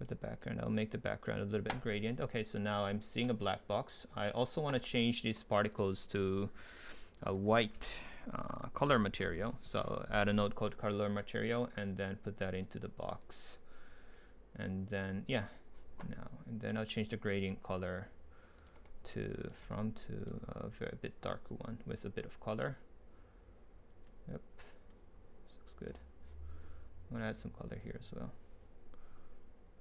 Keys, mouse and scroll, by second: 0.0-2.8 drag, 2.8-4.5 right drag, 4.8-5.7 right drag, 5.7-9.4 drag, 11.2-15.3 drag, 21.2 ctrl+right click, 23.9 ctrl+right click, 24.6 ctrl+right click, 29.4 right click, 29.6 right click.